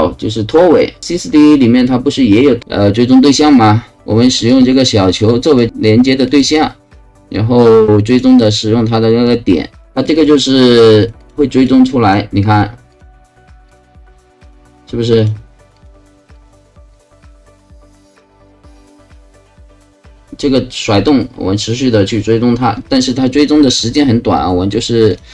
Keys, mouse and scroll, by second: 4.4 click, 5.4 click, 6.2 click, 8.1 click, 9.7 click, 10.0 click, 10.2 click, 10.4 click, 10.6 click, 10.8 click, 11.0 click, 11.2 click, 11.6 click, 12.1 click, 12.9 click, 13.7 click, 14.5 click, 15.2 click, 15.8 click, 16.4 click, 16.9 click, 17.2 click, 17.5 click, 17.7 click, 17.9 click, 18.1 click, 18.3 click, 18.4 click, 18.6 click, 18.7 click, 18.9 click, 19.1 click, 19.2 click, 19.4 click, 19.5 click, 19.7 click, 19.9 click, 20.1 click, 25.1 click.